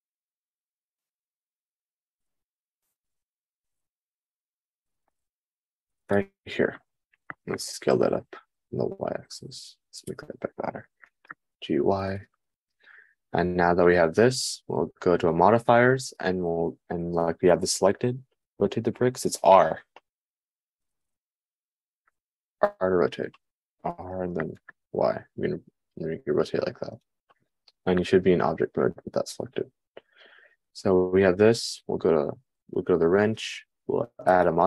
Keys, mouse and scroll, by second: 0.4 g, 1.7 g, 2.5 g, 4.8 g, 7.8 s, 11.7 g, 25.0 g, 26.7-29.6 middle drag.